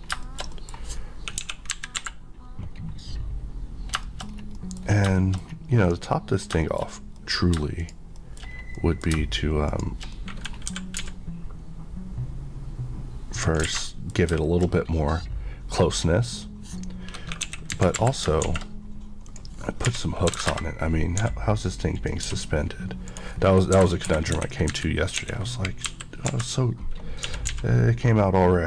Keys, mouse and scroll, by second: 0.0 scroll down 1, 0.3 middle click, 1.4 KP_1, 2.0 KP_5, 2.9 scroll down 1, 4.0 shift+scroll down 1, 4.1 shift+middle click, 4.9-5.5 scroll up 3, 5.2 shift+middle click, 5.9 click, 6.4 scroll, 6.4-7.0 scroll down 4, 6.7 shift+middle click, 7.2 middle click, 7.8 shift+click, 8.2 shift+middle click, 8.5 scroll down 1, 8.8 middle click, 9.7 click, 10.2 middle click, 10.8 typing, 13.5 click, 13.7 alt+a, 13.9 middle click, 14.3 scroll down 1, 14.5 shift+middle click, 17.5 KP_1, 18.0 KP_5, 18.4 shift+a, 19.9 r, 20.3 KP_9, 20.5 Return, 21.2 g, 22.0 click, 22.3 s, 23.1 right click, 23.8-27.5 typing, 23.9 click, 24.1 Escape.